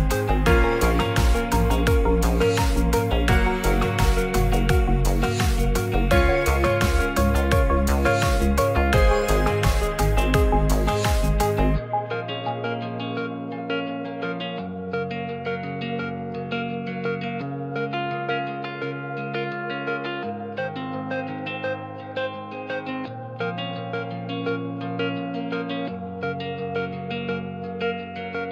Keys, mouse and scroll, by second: 0.3 click, 1.1-2.5 shift+drag, 3.4 right click, 5.6 ctrl+1, 6.1 middle click, 7.2 Tab, 7.6 ctrl+r, 9.7 Tab, 10.5 right click, 10.8 Tab, 11.2 Tab, 11.6 ctrl+r, 13.7 click, 14.0 Tab, 14.5 middle drag, 14.9 middle drag, 15.4 click, 16.1 Tab, 16.5 c, 16.9 click, 17.1 c, 19.0 c, 20.7 g, 21.8 click, 21.8 z, 22.1 Tab, 22.5 middle click, 23.7 middle click, 24.7 middle drag, 25.6 Tab, 25.9 click, 26.5 c.